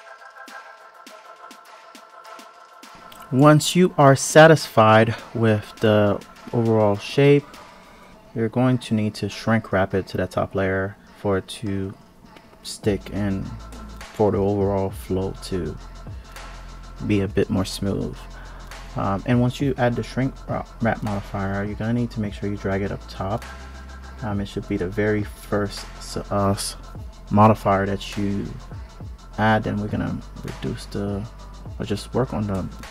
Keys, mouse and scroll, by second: 0.0 click, 0.3 click, 0.3 scroll down 1, 0.5 ctrl+shift+click, 0.8 ctrl+KP_3, 0.9 g, 1.2 r, 1.5 g, 1.7 click, 1.9 alt+z, 2.3 click, 3.0 Tab, 3.2 click, 3.5-4.4 scroll down 2, 4.4 click, 6.4 click, 7.8-8.6 scroll up 1, 11.0 click, 12.3-12.9 drag, 13.6 click, 15.4 click, 17.8 click, 18.2 click, 18.5 click, 20.9-22.3 drag, 23.0 click, 24.3-26.9 drag, 27.1-29.8 drag, 30.7-32.9 drag.